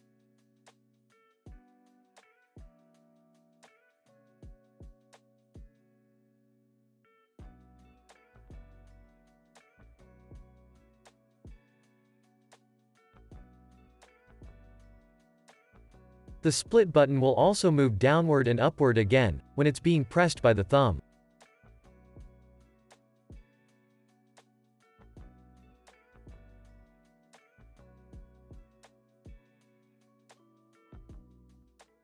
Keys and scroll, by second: 2.8 super+s, 17.8 p, 27.9 alt+x.